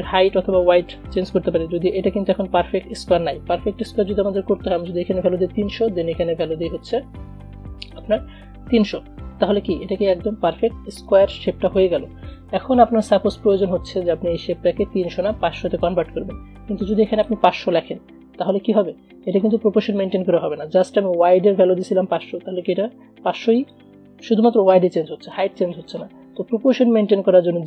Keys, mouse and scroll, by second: 3.7 ctrl+a, 8.0 click, 8.7 ctrl+a, 10.6 click, 13.3 click, 13.4-17.1 drag, 19.4 click, 20.9 ctrl+z, 22.1 click, 22.9 ctrl+z, 23.6 click, 25.9 click.